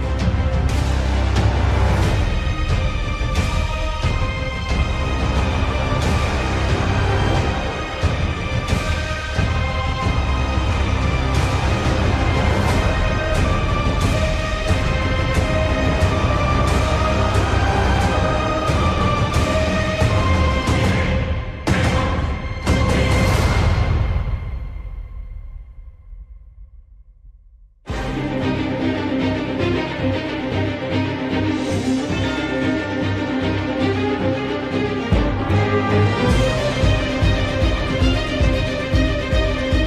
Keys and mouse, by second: 6.3 ctrl+r, 9.9 3, 10.2 middle click, 11.3 click, 12.4 KP_7, 17.4 g, 21.5 r, 26.4 shift+middle click, 27.2 shift+middle click, 28.7 ctrl+r, 35.8 3, 36.2 middle click, 38.9 KP_7.